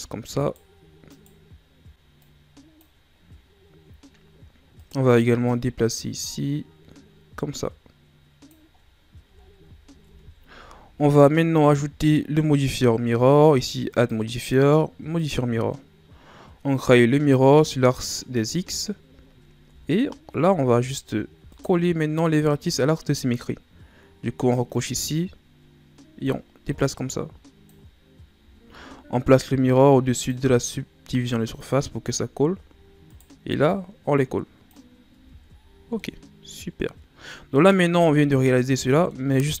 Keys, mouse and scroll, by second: 0.4 right click, 1.1 right click, 2.2-3.3 drag, 3.3-4.0 scroll down 4, 4.0-4.7 scroll up 5, 4.7 right click, 5.4-8.5 drag, 8.7-9.3 scroll down 2, 9.3-10.0 shift+scroll down 5, 10.0 Tab, 10.7-12.5 ctrl+scroll down 4, 13.9 click, 15.3-16.9 drag, 18.8-19.3 ctrl+scroll down 1, 19.3-19.6 scroll up 1, 19.6 Tab, 21.5 right click, 24.7 click, 25.5-26.2 scroll up 1, 26.2-29.2 drag, 29.7-30.3 drag, 31.6 click, 32.0-33.0 scroll up 7, 33.0 right click, 33.7-35.1 drag, 35.1 Tab, 35.5 scroll down 4, 35.9-38.0 middle drag, 38.0-38.9 shift+scroll down 4, 38.9 middle click, 39.3-39.6 scroll up 3.